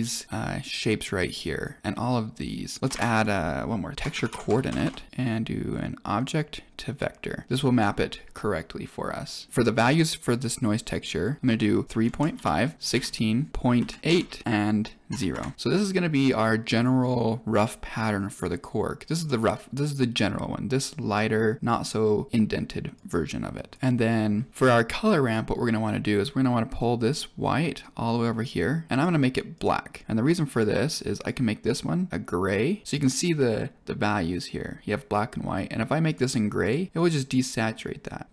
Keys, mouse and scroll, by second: 2.8 click, 2.8 shift+a, 4.7 BackSpace, 6.1 click, 9.4 middle click, 9.5 click, 13.5 BackSpace, 24.5 middle click, 27.0-28.4 drag, 28.9 click, 29.5 click, 31.1 click, 31.6 click, 32.8 click, 36.0 click, 36.5 click.